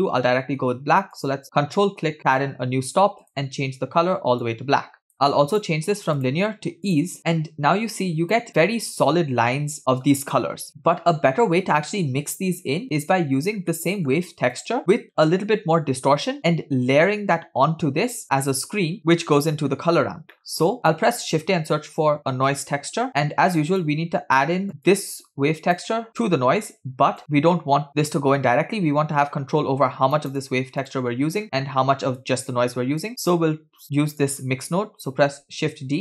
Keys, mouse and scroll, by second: 1.4 ctrl+click, 3.3 click, 5.1-5.8 drag, 6.2-8.5 drag, 8.5-9.6 scroll up 4, 9.7 scroll down 2, 13.7-14.2 shift+middle drag, 14.6 click, 15.1-15.6 scroll down 2, 20.3 middle drag, 20.8 shift+a, 24.4 middle click, 24.7 scroll down 1, 24.9 click, 26.1-27.2 drag, 27.2-27.9 scroll up 2, 27.9 scroll up 1, 27.9-30.2 drag, 30.9 click, 31.4-31.8 scroll down 2, 31.5 middle click, 32.2 click, 32.4-33.1 drag, 33.1 middle click, 34.2 drag, 35.3 shift+d.